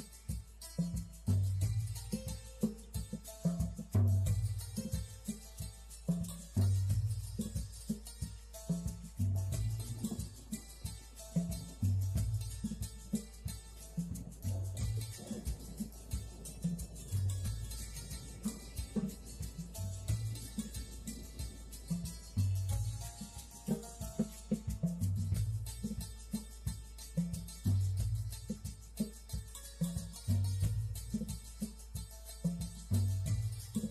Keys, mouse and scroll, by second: 0.9 click, 4.7-6.0 drag, 7.3-8.3 drag, 8.8 click, 11.6-12.6 drag, 16.2 click, 16.9 click, 19.9 click, 23.3 click, 24.3 click, 25.3 shift+middle click, 26.9 click, 27.5-30.2 drag, 30.6 click, 31.6 click, 32.9 click.